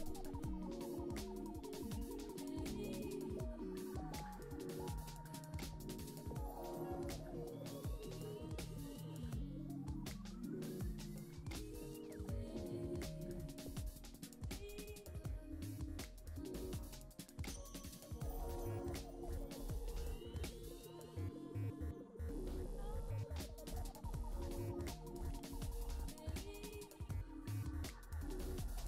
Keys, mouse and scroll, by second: 21.8-22.4 scroll down 5, 22.4-26.7 middle drag, 27.0-28.6 drag.